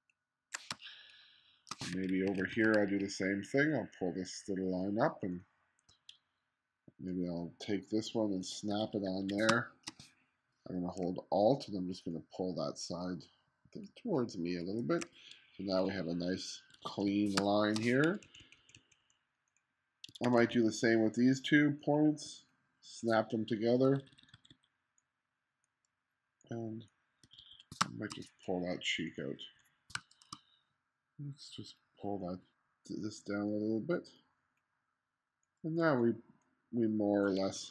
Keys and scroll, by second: 0.8 space, 2.0 2, 8.8 1, 9.5 space, 16.8 1, 17.4 space, 18.3 2, 19.9-20.8 typing, 23.9 1, 24.5 1, 27.3 1, 27.9 space, 30.0 space, 37.6-37.7 typing.